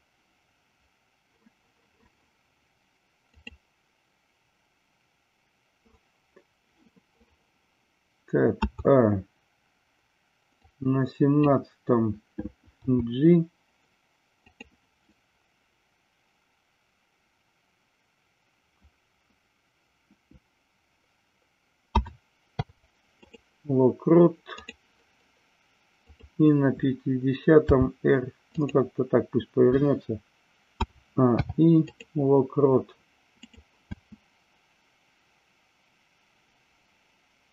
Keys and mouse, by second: 3.4-5.9 drag, 8.6 a, 10.5-11.5 drag, 12.9 g, 14.5 click, 21.9 a, 22.4 i, 24.6 click, 27.6 r, 28.5 click, 30.9 a, 31.2 i, 33.5 click, 33.9 space.